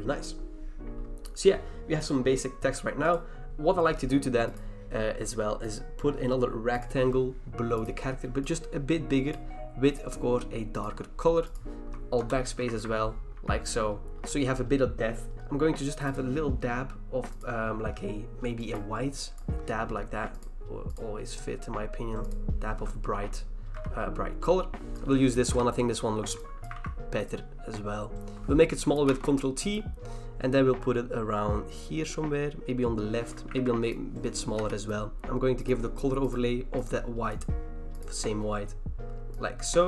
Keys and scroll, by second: 12.2 alt+BackSpace, 12.7 ctrl+d, 13.3 v, 15.3 v, 23.7 v, 25.5 Return, 26.7 ctrl+t, 29.1 Return, 33.5 ctrl+t, 34.5 Return.